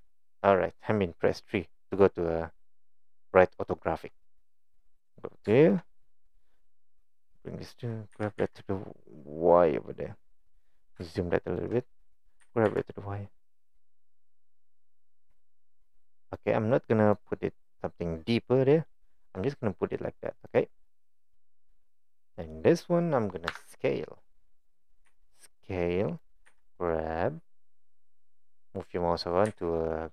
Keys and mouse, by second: 0.1 shift+middle click, 5.6 shift+middle click, 7.0 click, 8.2 g, 11.1-11.6 shift+middle drag, 12.5 g, 16.4 click, 19.4-20.2 middle drag, 20.5 click, 20.9-21.6 middle drag, 22.3 click, 23.5 KP_1, 25.1 s, 26.5 g, 29.5 g.